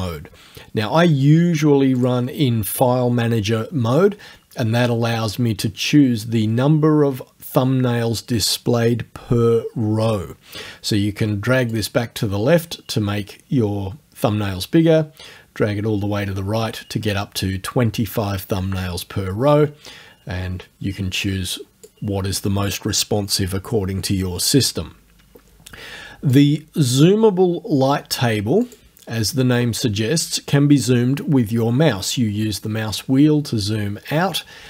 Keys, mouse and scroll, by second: 2.0 click, 11.7-22.0 drag, 26.3 click, 28.7 click, 32.0-33.3 scroll down 3, 33.5-34.3 scroll down 1.